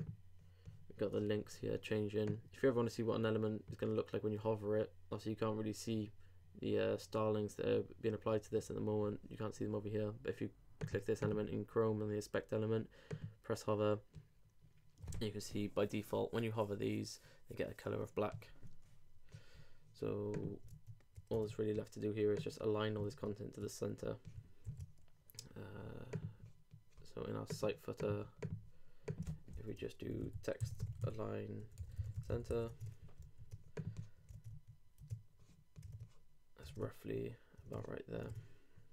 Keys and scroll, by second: 23.1 super+Tab, 24.7 super+w, 32.5 super+;, 32.7 super+Tab, 33.2 super+r, 34.3 super+Tab.